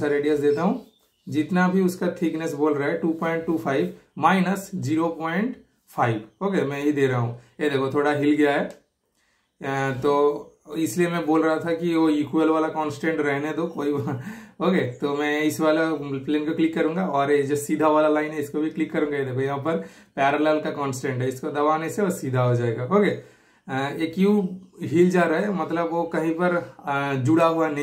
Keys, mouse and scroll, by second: 9.8-11.7 super+middle drag, 9.8-10.1 typing, 11.7 super+right click, 12.5 super+click, 14.3 super+Delete, 15.4 typing, 15.5 super+click, 18.9 super+click, 23.1 super+right click, 23.8 super+click, 27.3 super+click.